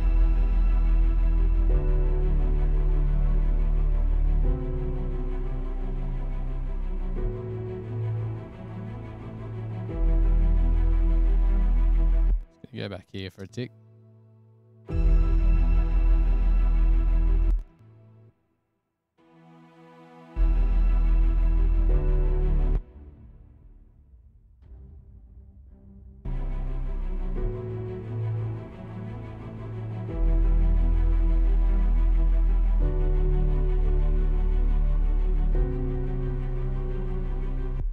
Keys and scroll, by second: 9.1 super+=, 11.5 super+=, 12.1 F7, 13.7 space, 16.6 super+-, 17.7 space, 17.9 space, 27.1 super+-, 30.9 super+e.